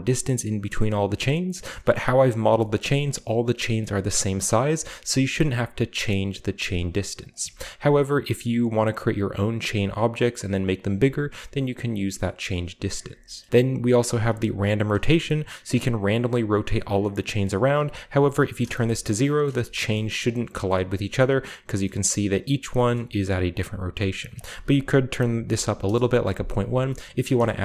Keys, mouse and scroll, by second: 2.1-2.9 scroll up 2, 2.5-3.6 shift+middle drag, 3.8 middle drag, 4.4-5.4 shift+middle drag, 5.4 shift+click, 5.6-7.5 shift+middle drag, 12.2 shift+click, 12.3 shift+middle click, 14.3-16.5 shift+middle drag, 16.3-17.1 scroll down 1, 17.1 middle click, 17.6-18.7 drag, 18.5 0, 18.6 Return, 19.8-20.8 shift+middle drag, 19.8-20.8 shift+scroll up 1, 24.3 click, 26.9-27.6 middle drag, 26.9-27.6 scroll down 2.